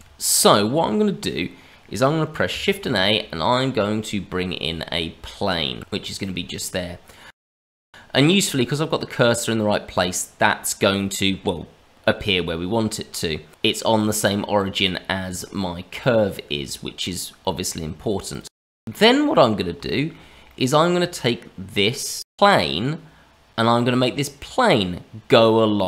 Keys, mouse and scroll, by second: 0.6-2.4 scroll up 1, 2.4 scroll up 1, 2.6 shift+a, 7.4 middle click, 12.2 middle click, 13.9 middle click, 15.9 click, 17.4 middle click, 18.3 click, 18.6 middle click, 19.4-19.7 scroll up 1, 19.8 shift+middle click, 20.5 middle click, 22.6 middle click.